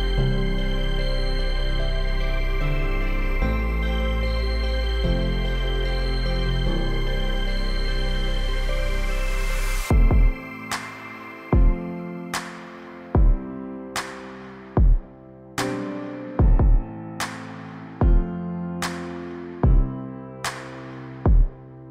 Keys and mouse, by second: 0.0-0.8 middle drag, 5.8 right click, 6.0 Tab, 7.0 middle click, 7.7 middle click, 8.2 click, 9.8 shift+click, 10.5 shift+click, 11.3 shift+middle drag, 12.0 shift+middle click, 12.4 shift+middle click, 12.8 middle click, 13.3 middle click, 14.2-14.7 shift+middle drag, 15.6 shift+click, 17.8-19.0 shift+drag, 19.7-20.4 middle drag, 21.1 shift+middle drag, 21.6-21.9 shift+middle drag.